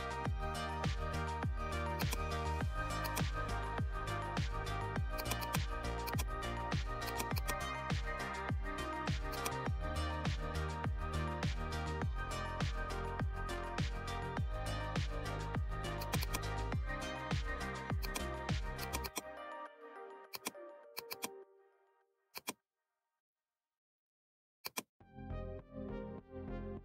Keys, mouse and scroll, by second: 1.9 click, 1.9-9.2 drag, 9.2-15.9 drag, 15.9-26.8 drag.